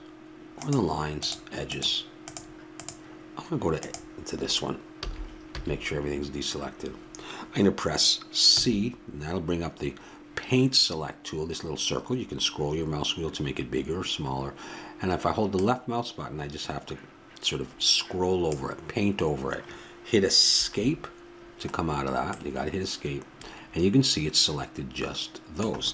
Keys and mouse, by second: 5.0 a, 5.5 a, 8.4 c.